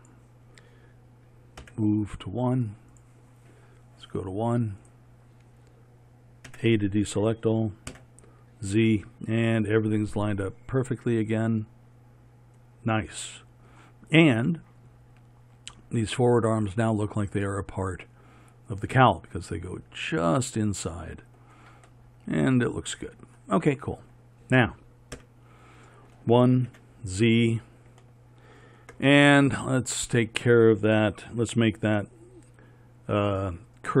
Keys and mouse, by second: 1.7 m, 6.6 a, 8.0 z, 25.3 KP_1, 26.8 z.